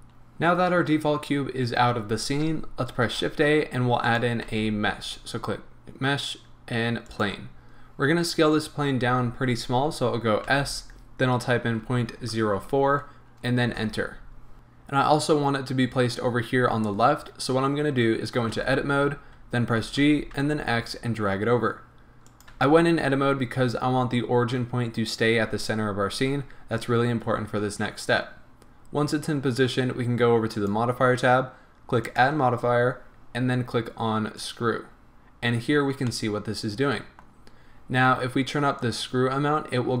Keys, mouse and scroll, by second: 4.1 click, 4.5 shift+a, 7.8-10.6 scroll up 1, 10.6 s, 13.8 Return, 14.5-22.4 middle drag, 18.5 Tab, 19.8 g, 22.4 click, 22.5 Tab, 30.6 click, 32.0-36.2 drag, 35.4-36.2 scroll down 1, 36.2-38.8 middle drag, 38.8-40.0 drag.